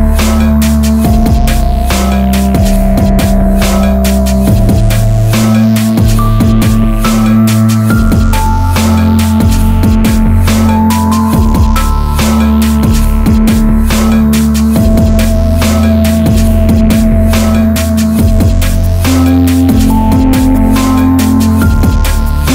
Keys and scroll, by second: 2.0 Return, 20.2 ctrl+t.